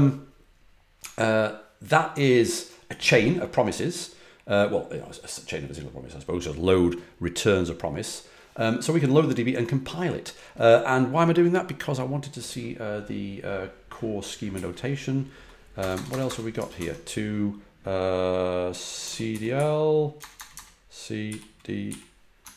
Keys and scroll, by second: 14.5 Up, 15.7 BackSpace, 15.8 BackSpace, 16.0 BackSpace, 16.2 BackSpace, 16.5 Tab, 16.7 Tab, 18.7-21.8 typing.